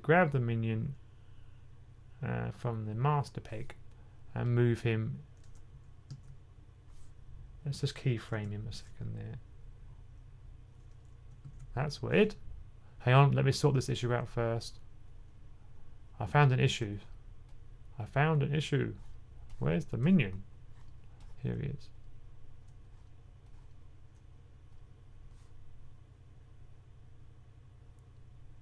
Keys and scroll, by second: 6.0 super+z, 8.2 F6, 11.2 F6, 11.3 super+z.